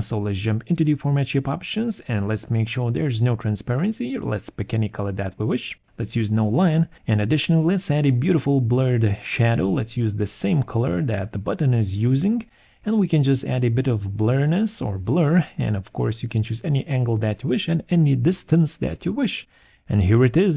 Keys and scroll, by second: 13.6 2.